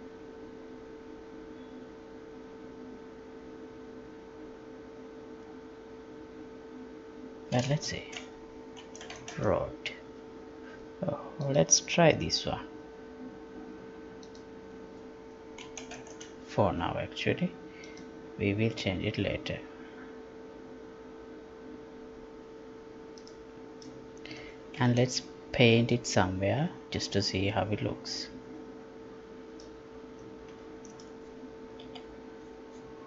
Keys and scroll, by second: 8.0 ctrl+a, 31.9 F11.